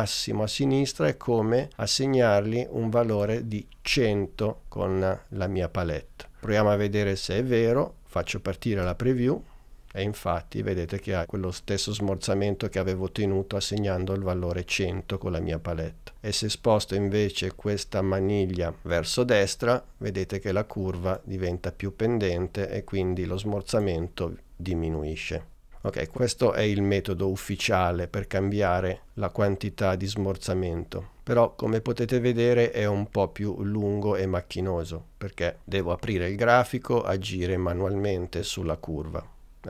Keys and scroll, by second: 8.8 space.